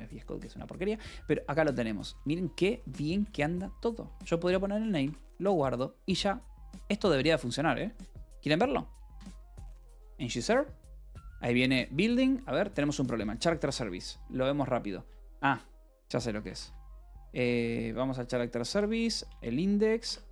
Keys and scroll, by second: 1.7 ctrl+n, 4.3 Return, 4.6 Escape, 5.4 ctrl+s, 7.8 alt+p, 7.8 alt+w, 8.6-9.9 typing, 15.1-17.2 typing, 18.1 Return, 18.7 :, 19.0 j, 19.2 Return.